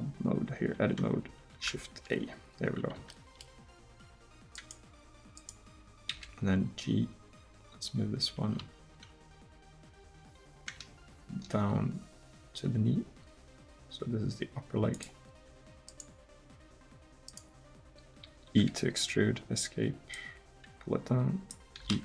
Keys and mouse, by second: 1.7 shift+a, 6.1-7.2 drag, 6.1 g, 18.3 e, 21.8 click, 21.8 e.